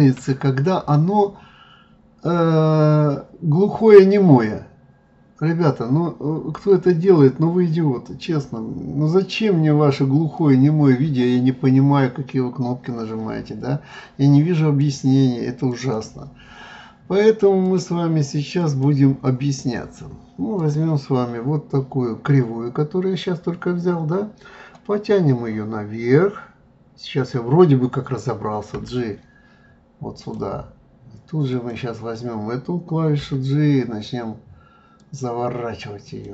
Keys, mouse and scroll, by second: 0.0 shift+a, 7.0 click, 14.8 click, 15.6 click, 17.6-20.7 drag, 31.5 click, 33.2 g, 36.0 click.